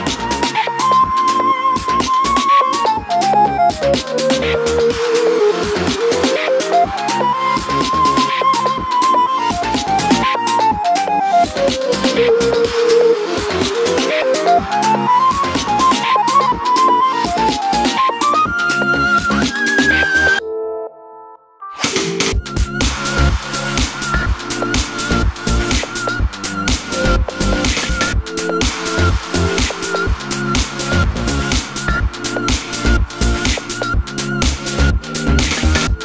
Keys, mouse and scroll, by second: 0.4 Tab, 3.4 KP_1, 4.5 a, 8.5 click, 9.1 shift+middle click, 10.6 KP_1, 12.2 Tab, 12.4 click, 12.9 g, 14.7 click, 15.5-18.1 shift+middle drag, 18.1 click, 18.7 click, 20.1 Tab, 20.4 scroll up 1, 20.6-26.7 shift+middle drag, 26.7 click, 27.2 shift+click, 27.6-28.8 middle drag, 28.8 ctrl+click, 30.0-34.6 middle drag, 30.4 KP_3, 30.9 g, 32.4 g, 33.1 KP_3, 33.5 g, 34.6 click, 34.7-35.3 shift+middle drag, 35.3 click.